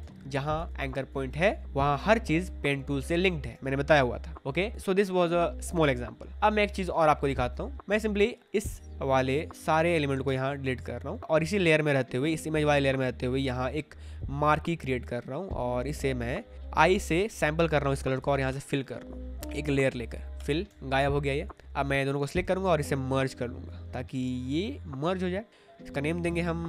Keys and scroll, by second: 0.0 ctrl+z, 1.6 shift+Up, 1.9 shift+Left, 3.6 space, 7.3 space, 10.2 Delete, 16.7 i, 18.4 alt+BackSpace, 20.3 alt+BackSpace, 20.7 ctrl+d, 26.5-26.6 typing.